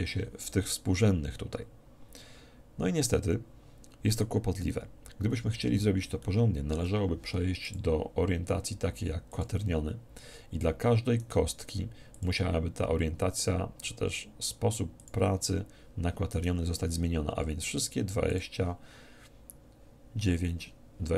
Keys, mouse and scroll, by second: 5.1-7.7 middle drag, 7.7-9.4 drag, 11.2-13.1 right drag, 12.1-13.9 drag, 17.7-19.4 drag, 17.7 right click.